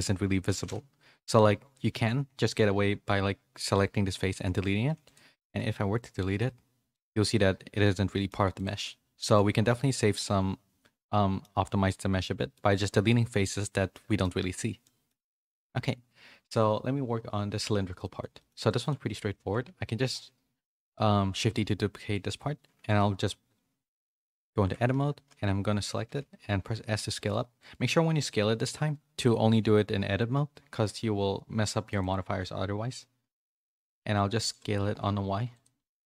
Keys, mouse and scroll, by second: 1.8 x, 4.2 x, 5.4 Tab, 6.3 /, 6.9-8.5 middle drag, 8.8 middle click, 9.9-11.4 middle drag, 11.9 click, 12.2 middle click, 13.9-15.0 middle drag, 15.7 a, 18.0 middle click, 18.3 shift+middle click, 18.8 click, 19.6 shift+d, 24.6 Tab, 24.9 a, 26.0 s, 32.2 s.